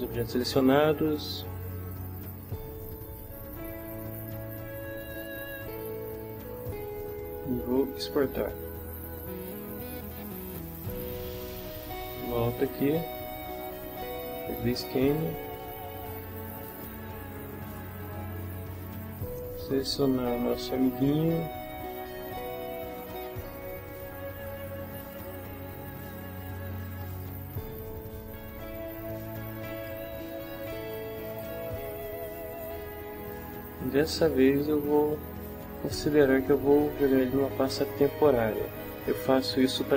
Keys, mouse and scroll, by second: 8.2 click, 11.0 click, 12.8 click, 14.2 click, 16.7 click, 25.1 click, 26.9 click, 29.8 click, 31.3 click, 32.5 click, 37.1 click.